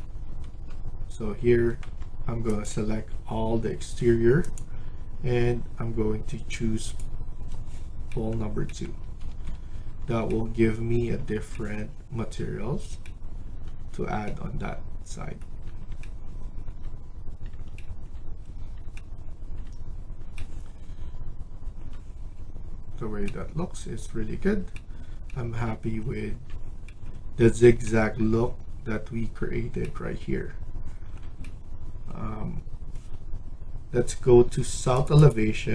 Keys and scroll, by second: 0.1 Escape, 0.4 Escape, 1.7 Tab, 9.0 Escape, 9.2 Escape, 9.5 Escape.